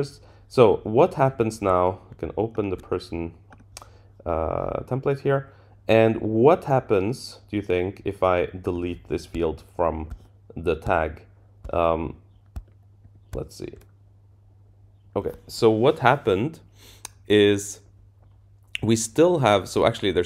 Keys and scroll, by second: 13.0 shift+Down.